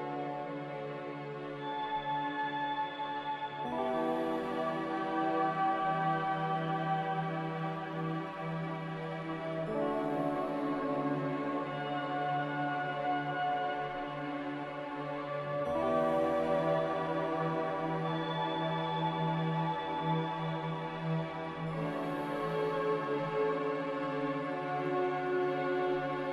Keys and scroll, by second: 9.6 z.